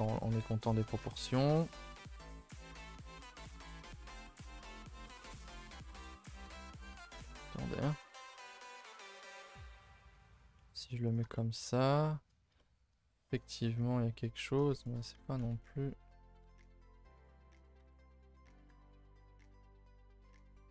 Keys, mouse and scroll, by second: 0.3 g, 0.8-1.3 middle drag, 1.3 scroll down 5, 1.6 a, 1.7 a, 1.9-3.5 middle drag, 3.5-4.6 scroll up 2, 4.6 KP_0, 5.2 shift+middle click, 6.4 2, 7.3 shift+middle click, 7.7 click, 8.2 g, 10.1-11.1 scroll up 4, 10.4 shift+middle drag, 11.1 click, 11.3 shift+middle click, 11.5 scroll up 1, 12.0 shift+middle click, 12.3 scroll down 1, 12.6-13.2 shift+middle drag, 13.2 click, 14.8 shift+click, 15.1 r, 17.1 g, 17.8 r, 18.6 g.